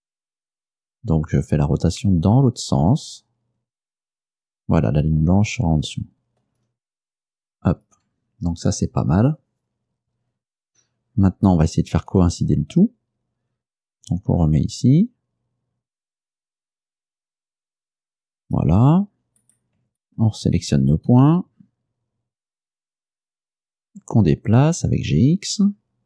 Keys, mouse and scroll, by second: 7.4 ctrl+click, 12.2 g, 18.5 click, 19.5 right click, 20.1 shift+right click, 21.2 g, 23.1 x.